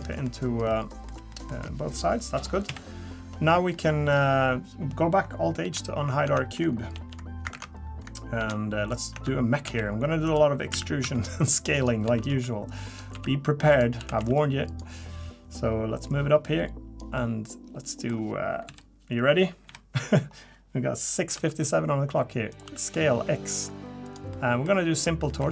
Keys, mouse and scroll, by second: 0.0 scroll down 1, 0.1 middle click, 0.4 scroll up 1, 0.7 middle click, 1.3 middle click, 2.7 KP_3, 3.4 scroll up 1, 3.7 middle click, 5.6 alt+h, 6.2 Tab, 6.9 alt+h, 7.5 ctrl+Tab, 8.4 alt+h, 8.9 click, 9.1 Tab, 9.7 s, 10.7 a, 11.0 s, 12.0 s, 13.1 s, 14.0 s, 16.1 click, 17.2 middle click, 18.7 KP_3, 19.7 KP_1, 21.3 s, 22.6 s, 24.3 middle click, 24.9 click, 25.3 middle click.